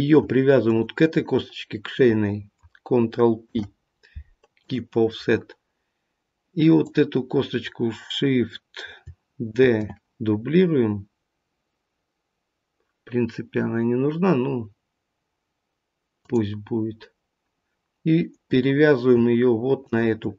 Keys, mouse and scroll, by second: 0.6 shift+click, 3.3 ctrl+p, 6.7 click, 9.5 shift+d, 19.8 shift+click.